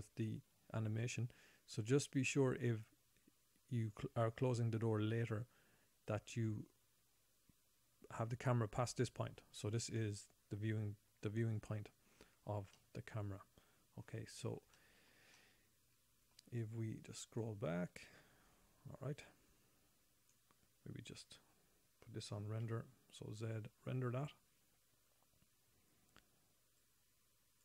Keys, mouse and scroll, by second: 8.3 scroll up 4, 9.9-11.7 scroll down 4, 12.3-12.9 scroll down 5, 13.6 middle click, 14.7-15.3 scroll down 2, 15.1 shift+middle click, 15.8 middle click, 17.8 right click, 21.9 scroll up 2, 22.6-23.0 scroll down 1, 23.0 z, 26.3 scroll down 1, 27.1 click.